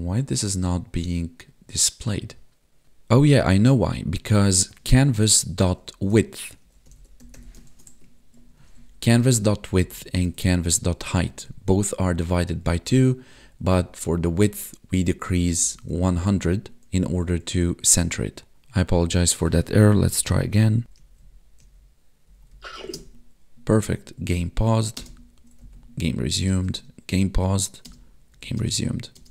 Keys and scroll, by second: 5.5 Left, 7.7 ctrl+s, 8.0 Escape, 8.6 Right, 8.7 Left, 9.3 ctrl+shift+Left, 9.9 ctrl+shift+Right, 11.1 Left, 11.4 Right, 11.7 Left, 12.0 Right, 12.7 Left, 13.6 Right, 16.1 ctrl+shift+Right, 17.0 Left, 17.3 Right, 17.5 Left, 18.5 Tab, 20.1 Down, 20.8 Up, 21.0 Left, 21.2 Up, 21.6 Left, 22.3 Up, 22.5 Right, 22.8 space, 25.0 space, 25.6 Up, 25.8 Down, 26.5 space, 27.8 space, 28.3 Left, 28.4 Up, 28.6 space.